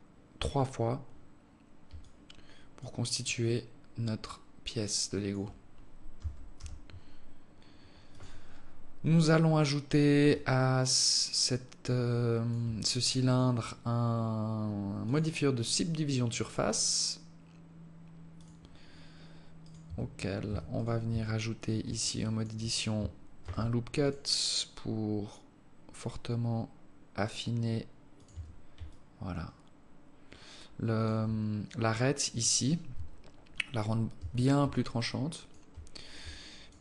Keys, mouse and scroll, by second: 1.9 alt+click, 3.1 alt+click, 5.9 g, 10.1 alt+click, 13.1 click, 16.5 click, 18.2 click, 18.9 scroll up 2, 19.4 right click, 19.7 Tab, 20.3 Tab, 20.5 right click, 20.9 Tab, 21.8 alt+click, 23.2 ctrl+r, 28.1 Tab, 28.7 alt+click, 32.7 Tab, 33.9 Tab, 34.5 alt+click, 36.1 alt+click, 36.7 alt+click.